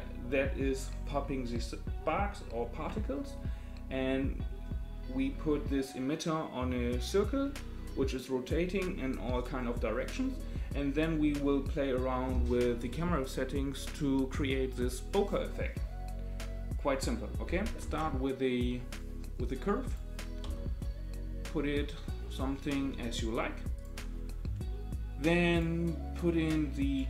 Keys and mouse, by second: 17.8 shift+a, 20.4 s, 25.5 click, 26.4 click.